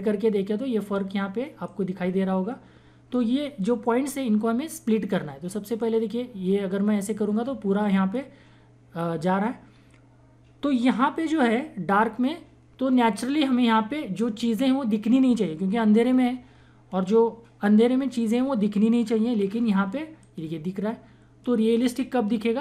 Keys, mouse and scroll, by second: 5.7-10.7 drag, 20.1-22.6 drag.